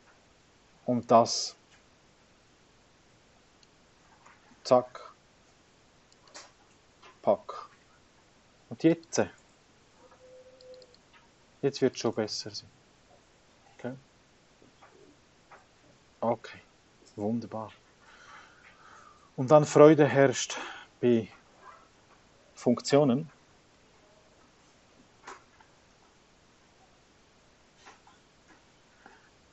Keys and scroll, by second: 0.4 BackSpace, 9.2 9, 10.0 9, 11.6 9, 12.5 BackSpace, 13.4 Return, 22.0 x, 24.7 v, 28.1 x.